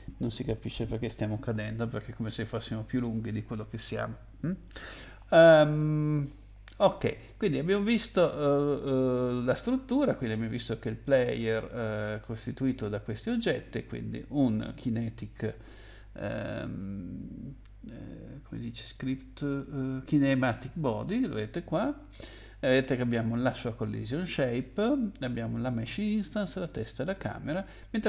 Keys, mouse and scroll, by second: 13.5 click, 23.4 click, 25.7 click, 26.6 click, 27.1 click.